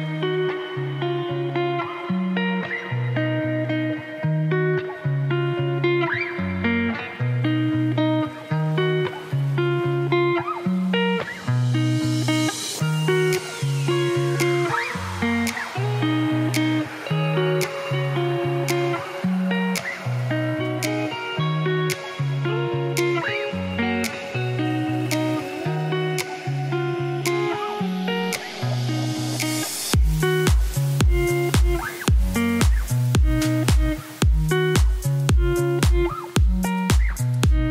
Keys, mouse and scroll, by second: 4.8 ctrl+s, 6.2 click, 7.0 ctrl+s, 10.8-14.8 drag, 14.8 KP_0, 15.1 KP_0, 15.4 g, 17.7 click, 18.4 shift+s, 19.1 shift+a, 19.2 s, 20.0 KP_1, 20.2 right click, 20.5-22.4 scroll up 1, 22.4 g, 24.6 middle click, 24.9 scroll down 1, 25.0 KP_0, 25.6 click, 27.2-28.5 drag, 30.1 ctrl+b, 31.2-33.6 drag, 34.0-37.7 drag.